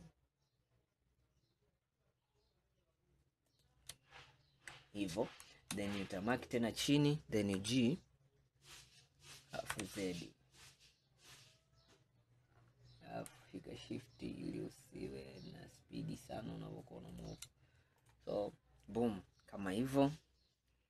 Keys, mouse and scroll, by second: 4.2-4.9 scroll down 1, 4.9 scroll up 2, 6.0 click, 7.6 g, 18.1 click, 19.3 scroll down 2, 19.8-20.8 scroll up 4.